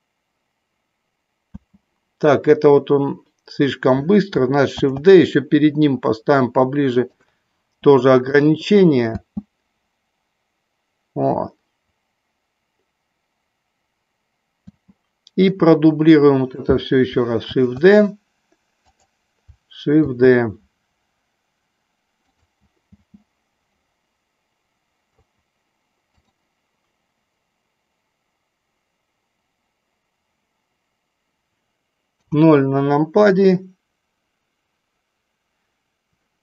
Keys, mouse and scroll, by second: 1.8 space, 4.8 shift+d, 8.7 click, 9.4 space, 15.0 space, 15.7-16.6 drag, 17.6 shift+d, 19.1 click, 20.2 shift+d, 23.2 space, 32.3 KP_0.